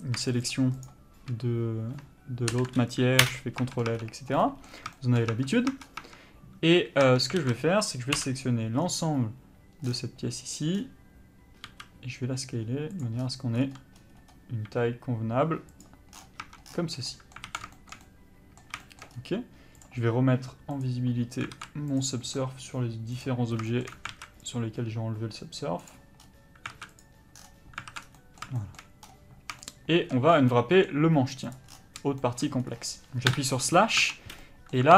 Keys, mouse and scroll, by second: 0.6 shift+click, 3.4 ctrl+l, 3.5 Return, 3.8 Tab, 4.1-5.0 scroll up 3, 4.2 Tab, 4.6 middle click, 5.1 shift+middle click, 5.4 scroll down 1, 5.5 Tab, 6.0 scroll up 1, 6.2 Tab, 7.6 alt+a, 8.3 l, 10.0 scroll down 1, 11.8 s, 13.2 click, 13.7 scroll up 1, 14.8 s, 16.3 scroll down 1, 16.6 Tab, 16.8 scroll down 1, 17.2 middle click, 17.6 alt+a, 17.9 shift+middle click, 18.2 scroll up 1, 18.3 middle click, 19.3-20.0 scroll up 1, 20.0 click, 21.7 alt+a, 22.2 click, 23.9 shift+middle click, 24.3 alt+a, 24.7 click, 26.4-26.9 scroll up 1, 26.9 alt+a, 27.2 click, 27.5 scroll down 1, 28.1 alt+a, 28.1 scroll down 1, 28.3 middle click, 29.2-29.8 scroll down 1, 29.8 shift+middle click, 30.5 scroll up 1, 30.7 middle click, 31.7 click, 31.9-32.4 scroll down 1, 32.4 shift+middle click, 32.6 shift+scroll down 1, 32.8 scroll up 1, 33.5 KP_Divide, 34.2 Tab, 34.6 middle click.